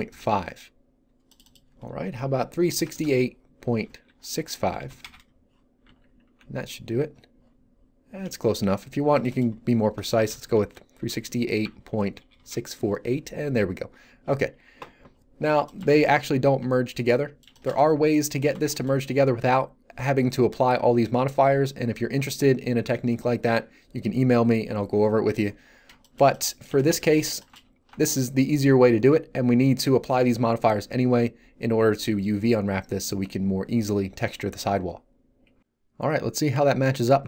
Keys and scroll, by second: 0.1 Return, 2.8 BackSpace, 4.7 6, 4.9 5, 5.0 Return, 5.8 z, 10.1 BackSpace, 10.9 4, 11.6 8, 12.4 Return, 16.3 z, 37.0 3.